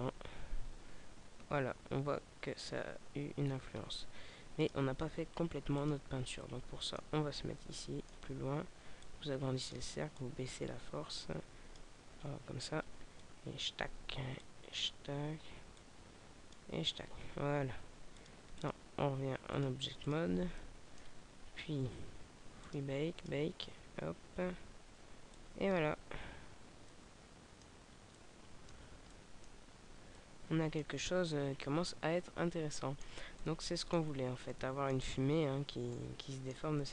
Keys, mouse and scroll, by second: 5.8 click, 6.4 middle click, 7.0 scroll down 2, 7.6 middle click, 9.0 click, 10.1 click, 12.1 scroll down 2, 13.2 click, 18.0 click, 19.4 click, 20.6 middle click, 21.8-22.2 scroll up 1, 22.6 click, 25.4 click, 26.4 alt+a, 26.9 middle click, 27.8 scroll down 2, 28.1 middle click, 29.8 alt+a, 29.9 middle click, 34.1 scroll down 2, 34.4 middle click, 36.0 middle click.